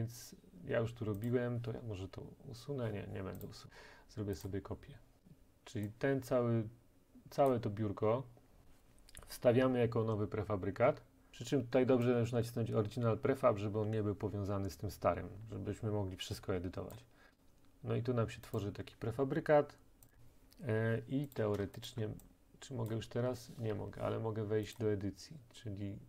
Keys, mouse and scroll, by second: 1.3 click, 3.5 click, 4.4 click, 7.5 click, 17.0 click, 18.6 click, 20.1 click, 21.9 shift+click, 22.9 click, 23.7 Escape, 24.8 click.